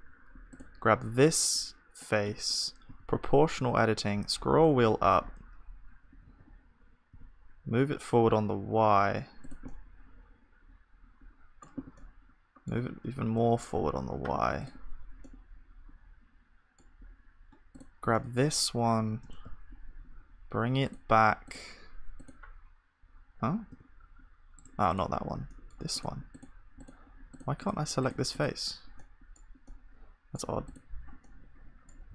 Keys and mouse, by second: 1.1-2.9 drag, 1.2-24.2 middle drag, 2.9 g, 18.2-19.9 drag, 18.3-19.9 right drag, 19.3 h, 19.4 u, 23.0-24.2 drag, 23.8 g, 25.5-32.1 drag, 25.5-32.1 middle drag, 25.5-32.1 right drag.